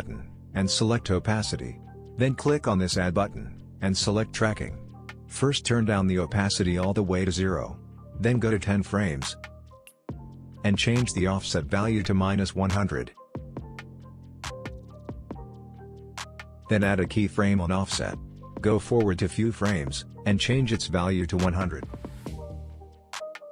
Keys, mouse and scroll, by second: 12.7-13.6 drag.